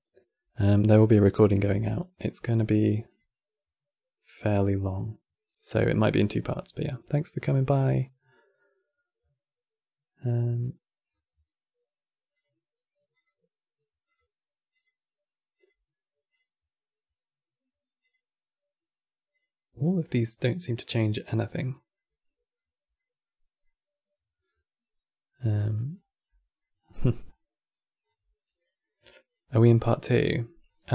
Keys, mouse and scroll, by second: 2.8 click, 10.7 scroll up 3, 12.0 click, 12.9 click, 13.8 click, 14.4 click, 15.3-19.7 drag, 19.7-25.6 middle drag, 25.6 scroll up 2, 26.0 middle click, 26.5-27.1 scroll up 5, 27.7-29.9 drag, 30.4 click.